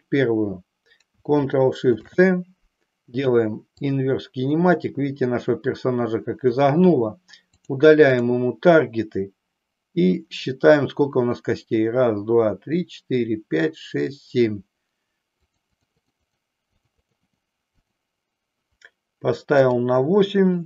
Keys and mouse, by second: 1.8 ctrl+shift+c, 7.6 click, 8.2 click, 15.4 click, 15.9 click, 16.9 click, 17.9 click, 19.5-20.6 drag.